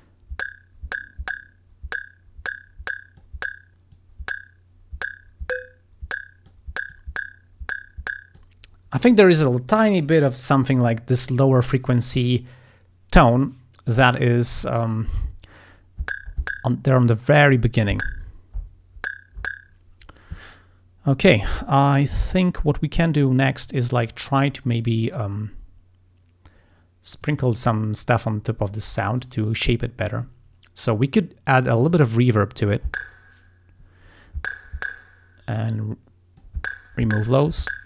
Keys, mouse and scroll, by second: 0.0-3.4 drag, 4.0-6.7 drag, 7.0-8.6 drag, 10.5-11.5 drag, 27.3 click, 31.9 click, 35.8 click, 37.3 click.